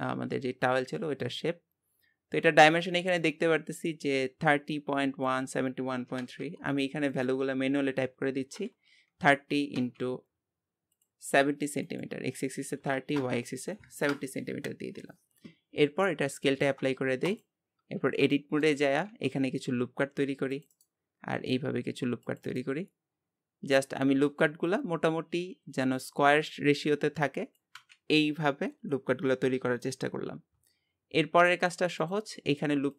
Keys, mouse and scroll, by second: 7.1-16.5 drag, 16.5 ctrl+a, 17.8 Tab, 18.3 shift+middle click, 19.1 ctrl+r, 21.4 ctrl+r, 23.9-28.0 scroll up 1, 32.0-32.9 drag.